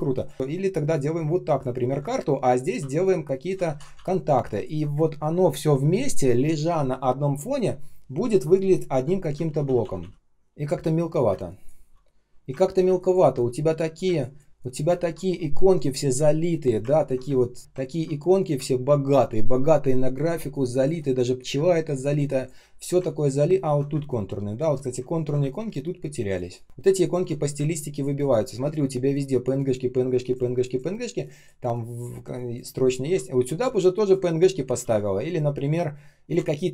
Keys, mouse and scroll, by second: 0.1 ctrl+click, 2.9 alt+click, 3.7 ctrl+d, 4.4 ctrl+click, 9.4 ctrl+z, 10.7 shift+0, 11.2 space, 11.7 space, 11.7 space, 12.6 ctrl+scroll down 1, 12.8 space, 13.3 space, 13.3 space, 14.8 ctrl+scroll up 1, 16.9 ctrl+scroll down 1, 17.2 space, 17.6 ctrl+scroll up 1, 17.6 space, 17.8 ctrl+scroll down 1, 20.2 space, 20.7 space, 21.9 space, 23.5 ctrl+scroll up 1, 23.8-25.8 typing, 25.1 ctrl+scroll down 1, 33.1 ctrl+scroll up 1, 34.7 ctrl+z.